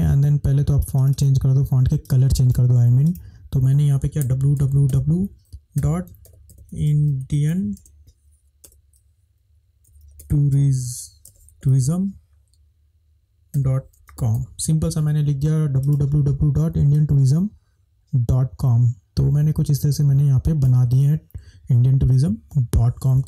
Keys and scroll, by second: 4.3-5.1 typing, 12.6-13.4 typing, 14.4-15.1 typing.